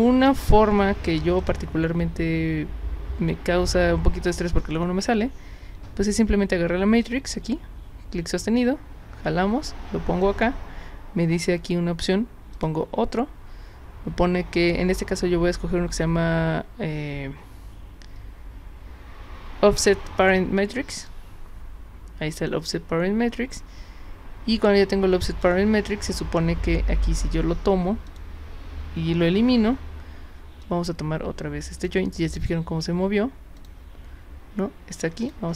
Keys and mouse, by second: 1.4 click, 7.0-10.2 drag, 12.6 click, 21.0 click, 25.3 click, 28.1 click, 30.6-31.8 drag, 33.6 click, 35.2 click.